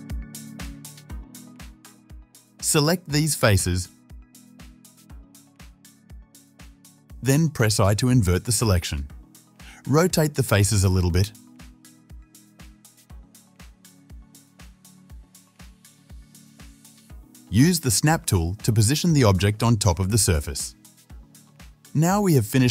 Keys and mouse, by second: 0.6 KP_7, 3.5 3, 3.8 c, 5.8 shift+z, 8.6 ctrl+i, 10.9 shift+z, 11.7 r, 15.9 shift+middle click, 16.1-20.2 drag, 17.3 Tab, 18.7 ctrl+z, 18.7-21.0 middle drag, 18.7-20.2 right drag, 22.2 Tab, 22.2-22.6 drag.